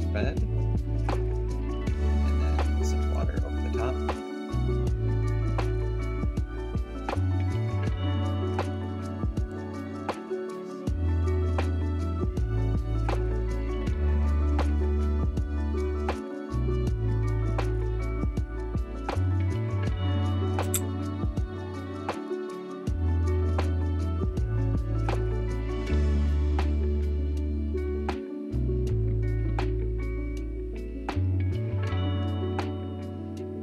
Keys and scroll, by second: 20.5 4.